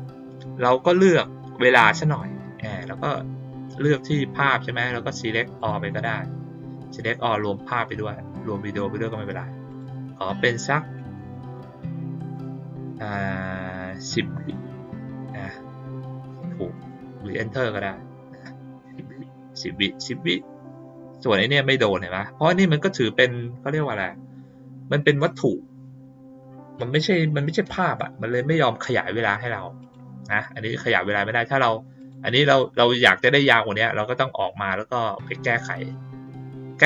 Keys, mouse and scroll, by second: 5.5 click, 9.6 click, 16.7 click, 29.2 click, 29.7 click, 30.2 click, 31.9 click, 32.4 click.